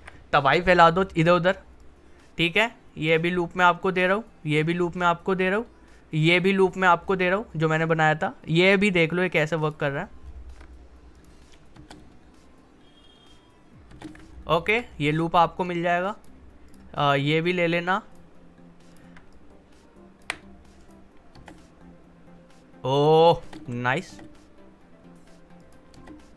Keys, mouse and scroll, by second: 0.6-1.8 scroll up 1, 1.8-3.3 drag, 3.3-3.8 scroll up 1, 4.0 click, 4.8-5.4 scroll up 1, 5.4-7.0 drag, 7.0-7.5 scroll up 1, 8.5-9.9 drag, 9.9-10.2 alt+scroll up 1, 11.1 click, 11.7 space, 13.9 space, 14.3 alt+scroll down 1, 14.9-15.6 scroll up 1, 15.6-20.8 drag, 21.3 space, 25.6 click, 25.9 space.